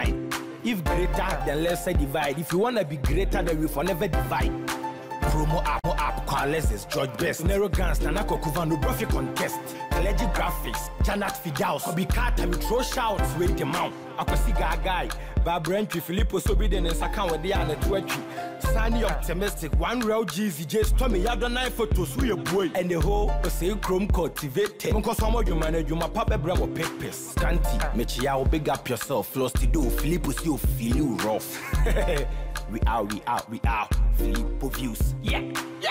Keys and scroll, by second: 11.5 ctrl+0, 35.8 ctrl+-.